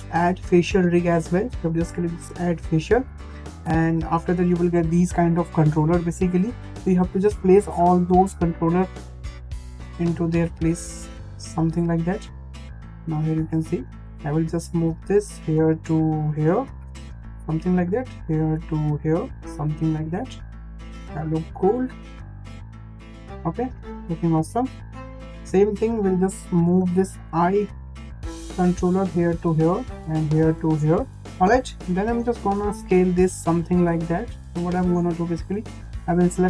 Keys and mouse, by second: 2.0 click, 3.5 shift+middle click, 7.2 click, 8.1 l, 9.8 click, 11.0 click, 11.1 click, 12.4 click, 12.5-13.6 drag, 14.0 click, 14.7 click, 14.8 click, 15.8 click, 17.5 click, 18.2 click, 19.0 click, 20.1 click, 20.7 click, 20.8 click, 21.8 click, 22.1 click, 22.6 click, 23.2 click, 24.4 shift+middle click, 25.2 shift+middle click, 25.8 click, 27.3 click, 27.4 click, 28.5 click, 30.1 click, 36.1 l.